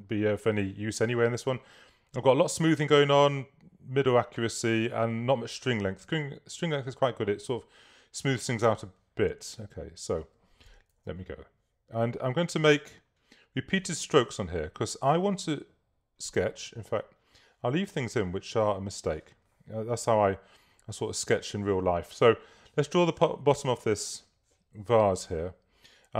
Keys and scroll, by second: 11.0 super+z.